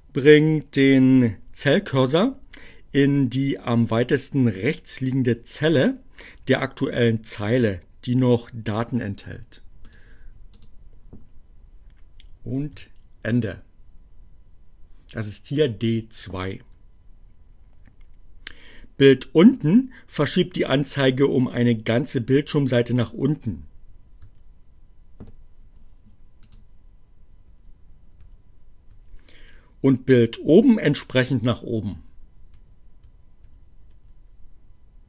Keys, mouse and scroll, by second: 9.9 click, 10.2 click, 12.3 End, 24.3 Page_Down, 26.5 click, 27.6 Page_Down, 27.7 Page_Down, 28.5 Page_Down, 32.6 Page_Up.